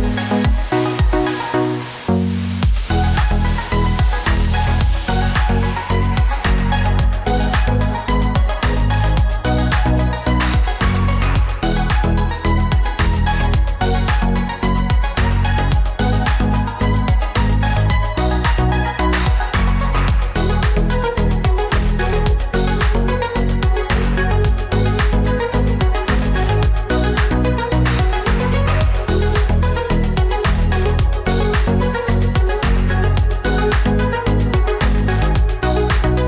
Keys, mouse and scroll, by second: 4.6 ctrl+v, 6.6 ctrl+a, 16.8 ctrl+click, 22.0 double click, 24.2 Return, 26.7 Right, 27.5 Return, 30.5 Left, 30.9 Down, 32.5 Down, 32.8 Right, 33.3 Down, 34.0 Down, 34.5 Up.